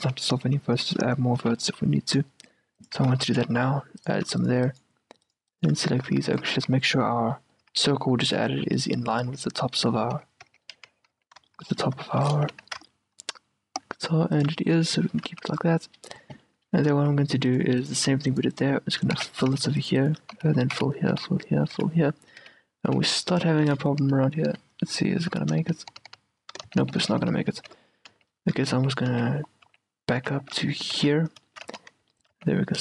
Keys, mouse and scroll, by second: 0.1 ctrl+z, 0.4 ctrl+z, 0.9 a, 1.2-3.3 middle drag, 1.5 a, 1.8 ctrl+r, 3.1 a, 3.3 ctrl+r, 4.3 a, 4.5-6.1 right drag, 6.1 click, 6.1 a, 6.5 right click, 6.6 click, 6.7 q, 6.7-10.8 right drag, 7.4-9.4 middle drag, 7.8 a, 9.4 q, 10.8 q, 11.3 z, 11.6-14.3 middle drag, 12.6 g, 14.8-18.9 middle drag, 15.4 z, 17.0 a, 18.9-22.5 right drag, 19.0-20.8 middle drag, 19.3-24.6 typing, 23.5-24.6 middle drag, 25.3 middle click, 25.5 middle click, 25.7 f, 26.0 f, 26.2 f, 26.8 ctrl+z, 27.3 ctrl+z, 27.7 ctrl+z, 28.2 z, 28.9 ctrl+z, 29.2 ctrl+z, 29.8 ctrl+z, 30.3 ctrl+z, 31.1-32.8 typing, 31.6-32.8 middle drag.